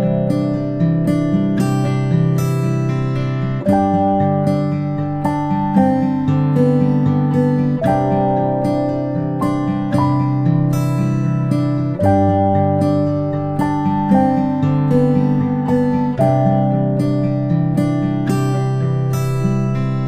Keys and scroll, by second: 18.0 ctrl+space, 18.2 ctrl+space.